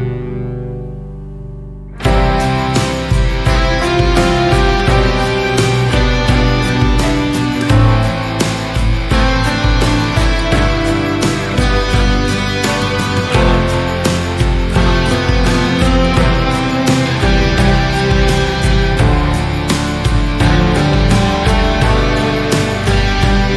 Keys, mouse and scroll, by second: 0.3 alt+z, 0.5 click, 1.8 g, 3.5 middle click, 4.3 click, 4.9 g, 6.6 Tab, 7.2 alt+z, 7.4 click, 7.6 scroll down 1, 7.8-9.2 middle drag, 9.2 scroll up 1, 9.6 shift+middle drag, 9.9 scroll up 1, 10.5 shift+middle drag, 10.8 click, 11.0-12.0 right drag, 12.0-13.9 shift+middle drag, 13.9 KP_3, 14.4 shift+middle click, 14.7 scroll up 1, 14.9 Tab, 15.7 alt+z, 16.2 click, 17.6 click, 17.9 click, 19.7 shift+middle click, 20.4 g, 22.2 click, 23.0 g.